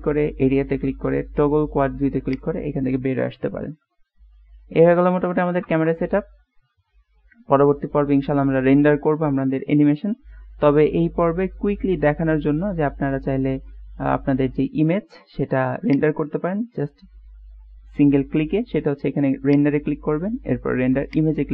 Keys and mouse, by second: 3.6 middle click, 4.2-5.2 middle drag, 5.7 KP_0, 16.2 click, 19.5-21.5 drag.